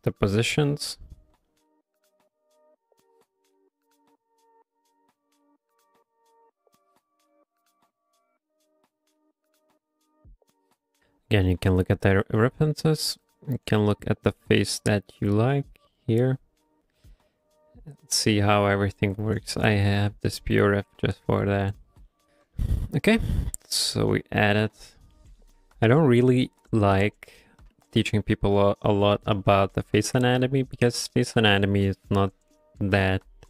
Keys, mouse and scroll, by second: 0.4 click, 0.7 f, 1.1 click, 1.5 shift+middle click, 1.9 f, 2.8 click, 3.8 f, 4.4 click, 5.5 shift+middle click, 5.8 f, 6.2 click, 7.3 ctrl+middle click, 8.2 shift+middle click, 22.3 right click, 22.3 shift+middle click, 22.6 middle click, 22.9 f, 23.3 shift+click, 24.6 shift+click, 25.2 shift+middle click.